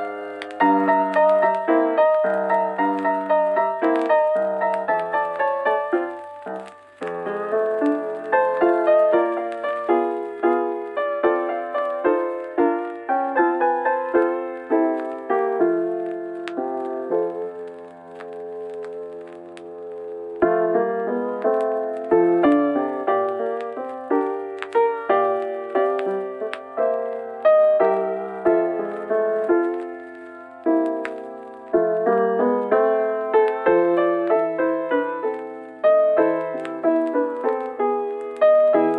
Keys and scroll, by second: 34.0 scroll, 35.1-35.5 scroll, 36.5 scroll, 37.4 scroll, 38.6 scroll.